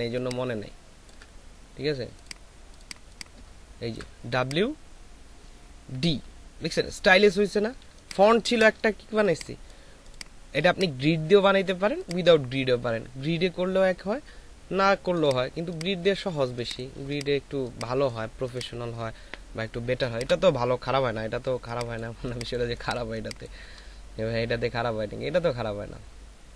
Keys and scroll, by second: 2.9 ctrl+alt+space, 7.8 ctrl+alt+space, 16.5 space, 20.0 space.